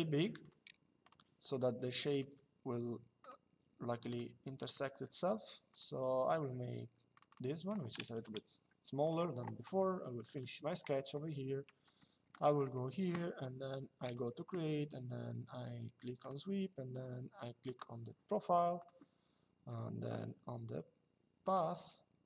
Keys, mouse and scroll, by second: 0.1 click, 1.8 click, 6.8 click, 8.1 Escape, 9.9 click, 12.0 click, 12.3 middle click, 13.7 click, 15.9 click, 17.4 click, 18.5 click, 21.1 click.